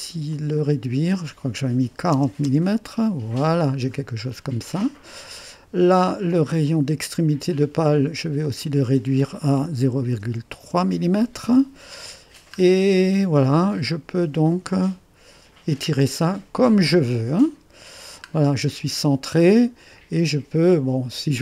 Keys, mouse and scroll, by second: 0.3-1.9 drag, 1.9 KP_4, 2.1 KP_0, 2.5 Return, 3.5-4.3 scroll up 1, 4.3 middle click, 5.0 right click, 5.2 click, 6.7-8.2 drag, 8.4 click, 9.8 ., 10.1 3, 10.6 Return, 12.1-12.9 scroll down 1, 12.9-13.9 scroll up 1, 14.7-18.5 drag, 15.0 typing.